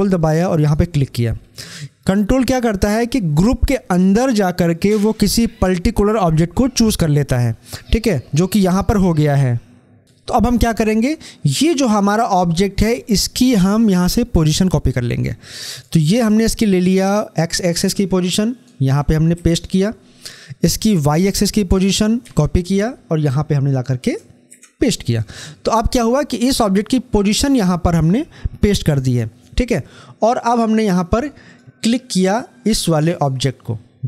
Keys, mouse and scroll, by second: 15.3-16.8 drag, 16.8 ctrl+c, 19.1 ctrl+v, 22.1 ctrl+c, 24.3 ctrl+v, 31.3 click.